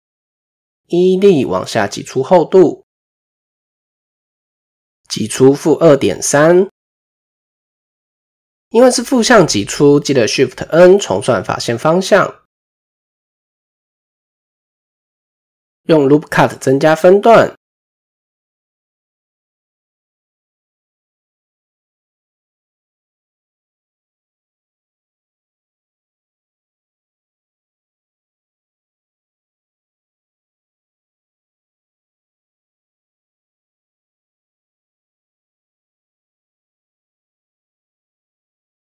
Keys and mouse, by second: 5.2-7.7 drag, 10.0 a, 11.1 shift+n, 14.0 click, 14.3 middle click, 15.3 shift+middle click, 17.0 typing, 20.9-22.1 middle drag, 22.3 ctrl+r, 23.2 middle click, 23.8 ctrl+r, 24.7 middle click, 26.1 click, 28.5 middle click, 30.1 middle click, 30.9 KP_1, 32.2 ctrl+b, 35.3 Tab, 35.7 middle click, 36.8 KP_7, 37.5-38.2 shift+middle drag.